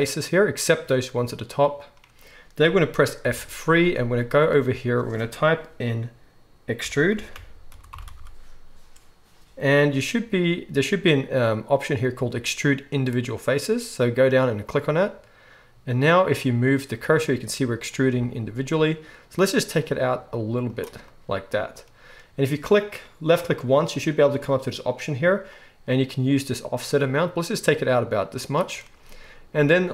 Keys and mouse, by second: 3.3 F3, 20.8-23.9 middle drag, 23.9-29.9 drag.